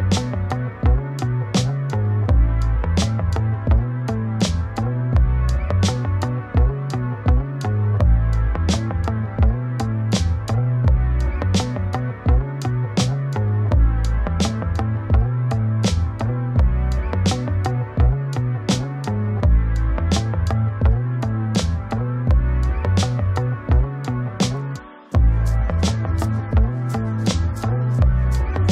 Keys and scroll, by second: 1.0 ctrl+space, 12.3 ctrl+space.